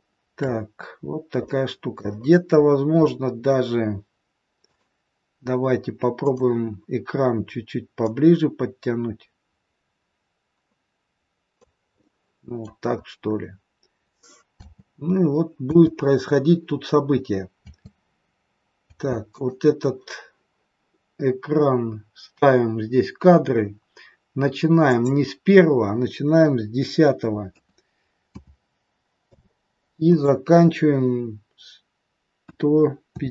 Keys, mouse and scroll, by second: 0.9-1.3 scroll up 2, 1.3 middle click, 2.1-2.9 scroll down 6, 2.9 middle click, 4.5 click, 6.1 click, 8.0 click, 12.0 middle click, 12.9-13.2 scroll up 5, 14.5 space, 15.6 space, 17.7 space, 19.0 space, 19.2 click, 24.9 click, 30.0 click.